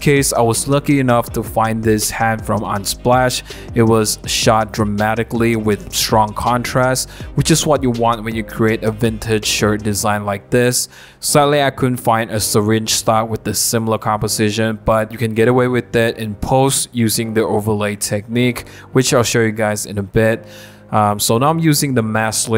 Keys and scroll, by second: 11.9 Return, 12.7 super+1, 19.6 super+t.